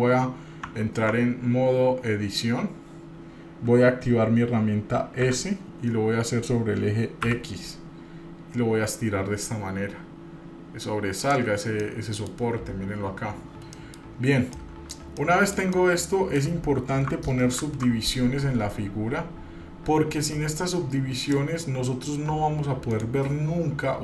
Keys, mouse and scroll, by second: 0.9 Tab, 1.3 Tab, 5.4 s, 12.0 middle click, 13.9 middle click, 14.3 scroll up 2, 14.7 middle click, 15.3 shift+middle click, 15.9 middle click, 17.7 ctrl+r.